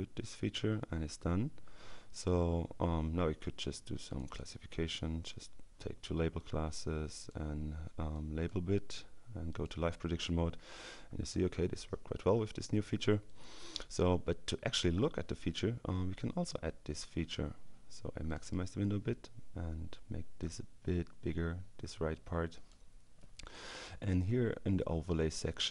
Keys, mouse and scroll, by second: 4.1 click, 6.4 click, 8.2 click, 9.6 click, 13.3 click, 18.1 click, 19.9-21.9 drag.